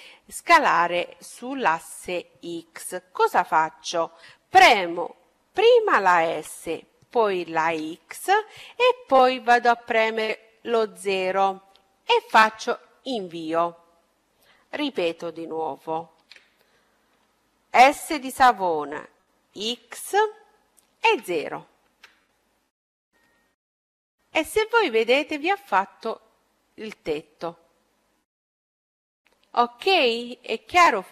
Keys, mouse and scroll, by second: 5.4 s, 15.3 ctrl+z, 17.8 s, 23.2-25.1 middle drag.